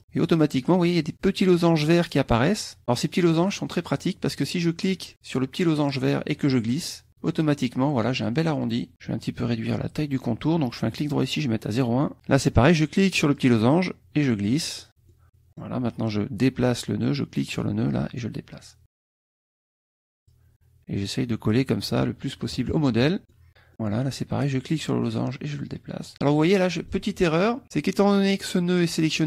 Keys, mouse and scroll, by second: 3.0 middle click, 6.0-7.2 drag, 8.6 click, 10.9 right click, 11.7 click, 13.3-15.0 drag, 15.1 click, 17.5-19.4 drag, 19.9 click, 22.5 KP_Subtract, 23.3-24.8 middle drag, 23.3-24.8 scroll down 2, 24.8-27.0 drag, 27.6 ctrl+z.